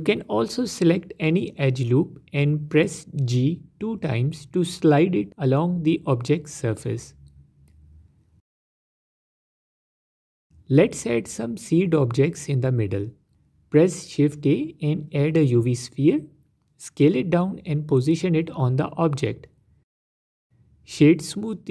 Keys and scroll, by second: 0.1 Tab, 2.6 g, 2.7 g, 6.4 g, 6.6 g, 8.6 Tab, 9.7 Tab, 12.1 shift+a, 17.8 s, 19.6 s, 20.0 s.